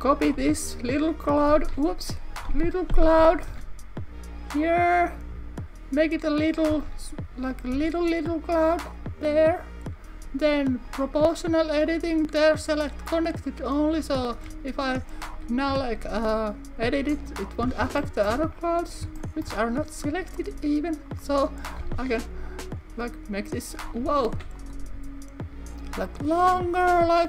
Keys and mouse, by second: 0.1 click, 0.5 r, 1.3 click, 1.6 super+z, 3.0 o, 3.6 r, 5.1 click, 5.3 s, 6.5 click, 7.8 g, 8.8 click, 10.9 click, 11.4 click, 12.0-13.6 drag, 17.1 click, 18.2 shift+middle click, 19.2 shift+middle click, 20.3 click, 24.2 super+z, 24.6 click, 26.1 click, 26.5 r.